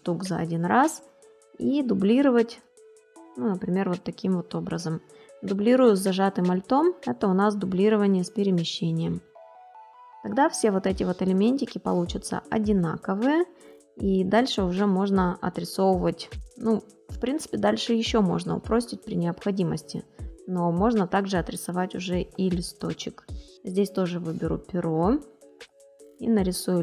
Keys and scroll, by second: 0.1 space.